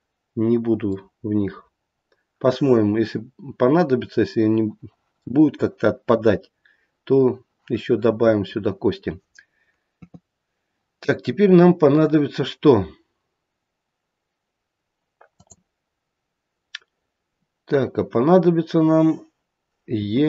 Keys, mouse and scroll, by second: 3.5-6.7 scroll down 2, 9.9 KP_3, 15.2 click, 19.9 e.